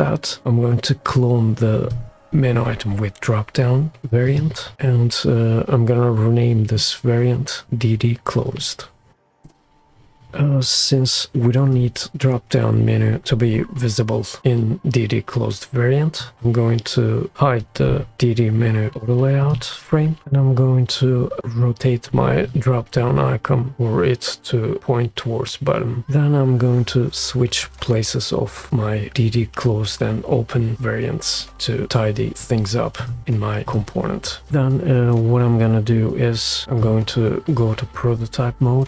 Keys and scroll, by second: 9.1 typing, 9.7 Return.